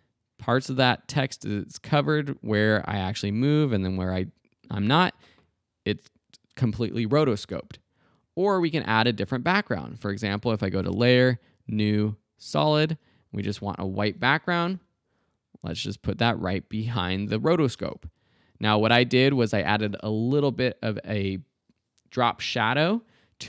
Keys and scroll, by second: 7.4 space, 8.5 space, 17.8 space, 19.9 space.